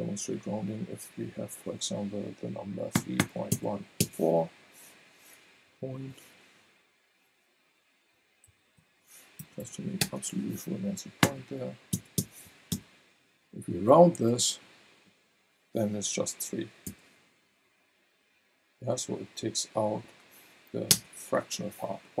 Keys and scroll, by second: 3.0 KP_3, 3.2 KP_Decimal, 3.5 KP_1, 4.0 KP_4, 5.5 Left, 7.5 Right, 8.5 Left, 8.8 Right, 9.4 BackSpace, 11.2 KP_Decimal, 11.9 KP_1, 12.2 KP_4, 12.7 Return, 16.8 v, 20.9 BackSpace.